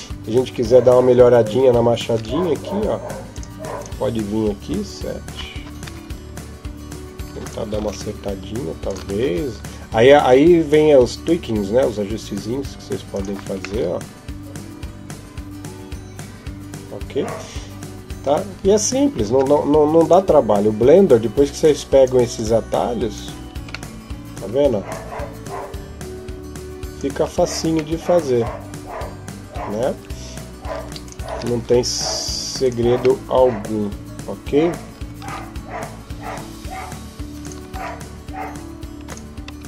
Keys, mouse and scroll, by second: 0.3-1.0 scroll up 2, 0.7 Tab, 1.9 ctrl+Tab, 3.6 right click, 4.5 KP_7, 5.6 g, 7.6 s, 9.0 g, 13.6 middle click, 19.1 Tab, 19.8 right click, 21.4 click, 21.6 click, 22.1 click, 23.3 Tab, 23.7 middle click, 24.7 click, 27.0 Tab, 27.7 middle click, 29.7 Tab, 30.8 right click, 31.1 ctrl+Tab, 32.4 right click, 33.0 middle click, 35.0 s, 37.5 e, 39.4 s.